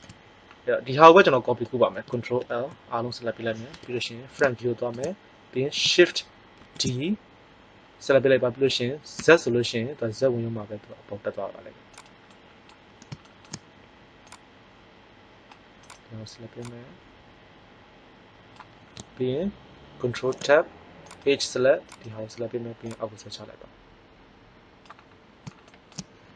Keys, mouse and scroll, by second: 2.3 ctrl+l, 3.6 KP_1, 6.5 shift+d, 12.0 click, 14.8-15.8 drag, 15.8-17.2 right drag, 16.5 click, 20.1 ctrl+Tab, 22.0 click, 25.3-26.3 middle drag.